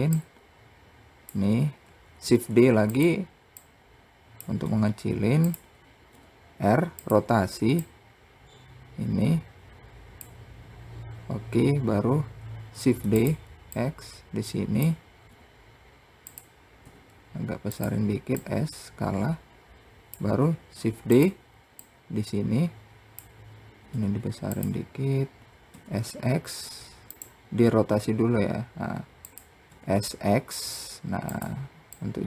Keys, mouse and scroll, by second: 1.6 shift+d, 3.0 click, 4.0 s, 7.2 click, 12.2 shift+d, 13.1 click, 14.7 r, 17.7 click, 20.1 shift+d, 21.2 click, 23.3 s, 25.1 s, 27.0 r, 31.4 click.